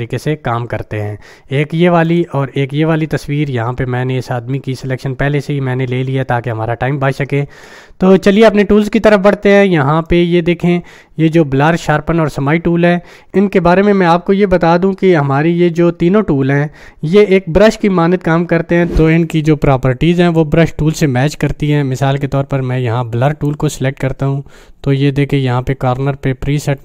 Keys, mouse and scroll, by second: 2.1 click, 10.1-10.7 drag, 23.3 click.